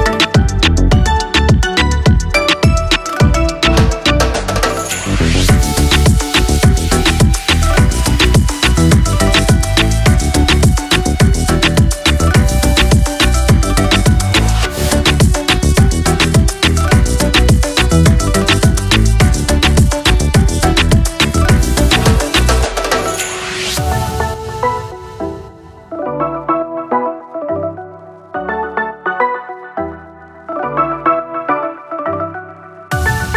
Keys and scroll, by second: 24.5 ctrl+0.